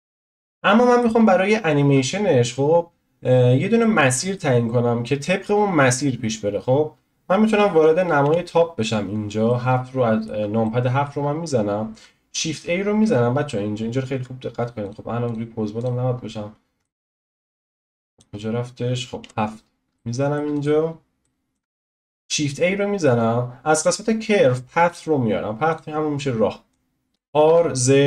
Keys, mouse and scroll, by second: 1.2-1.7 scroll up 1, 1.7-3.0 scroll down 1, 3.0-3.8 scroll down 1, 3.8-8.2 middle drag, 8.2 KP_7, 9.0-9.5 scroll up 1, 9.5-11.3 shift+middle drag, 11.3 scroll down 1, 11.5 scroll up 1, 14.9 `, 15.8 click, 16.1 scroll down 3, 16.8-18.3 shift+middle drag, 18.1 drag, 18.3 scroll up 2, 19.2 KP_7, 19.6-19.9 scroll up 1, 19.9-20.5 shift+middle drag, 20.5-20.9 drag, 20.9-21.2 scroll down 1, 21.2-25.8 shift+middle drag, 26.8 click, 27.1 r.